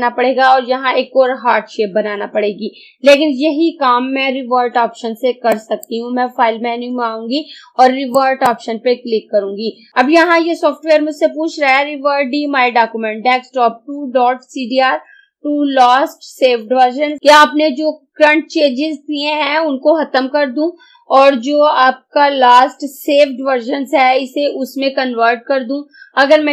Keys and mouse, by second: 5.6 click, 8.2 click.